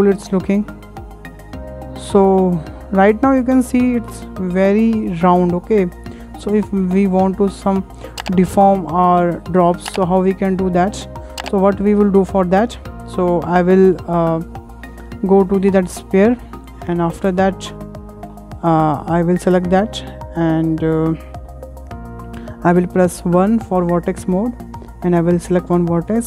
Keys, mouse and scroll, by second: 6.0 shift+middle click, 6.4-7.0 scroll down 2, 7.0-7.5 scroll up 3, 7.5-10.5 shift+middle drag, 10.5-11.2 scroll down 2, 11.2 shift+middle click, 11.6-12.4 scroll down 5, 12.4 scroll down 4, 12.6-15.0 shift+middle drag, 15.0 scroll down 2, 15.2 shift+middle click, 15.8 scroll down 2, 16.1-16.4 shift+middle drag, 16.4-16.9 scroll up 5, 16.9-17.4 shift+middle drag, 17.4-17.7 scroll up 2, 17.8 scroll down 2, 18.1-18.4 scroll up 6, 18.4 shift+middle click, 18.9 shift+click, 19.5 Tab, 19.5 Tab, 19.8-21.3 scroll down 7, 20.1 shift+middle click, 20.7 shift+middle click, 21.3-22.4 shift+middle drag, 22.4 scroll up 2, 23.2 1, 23.4 1, 23.7-24.0 scroll up 3, 24.2-25.9 shift+middle drag, 25.9-26.2 drag.